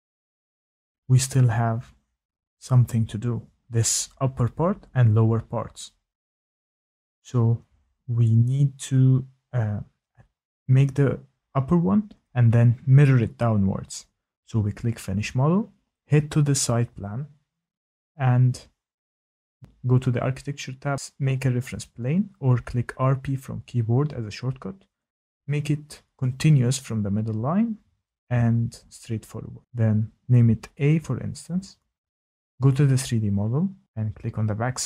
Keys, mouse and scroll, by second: 0.1 click, 0.7 click, 0.8 shift+middle click, 1.4 click, 3.8 shift+middle click, 12.3 click, 14.3 click, 14.5 click, 19.8 click, 22.8 click, 24.5 click, 26.9 click, 27.8 click, 28.3 a, 29.4 click, 31.2 click.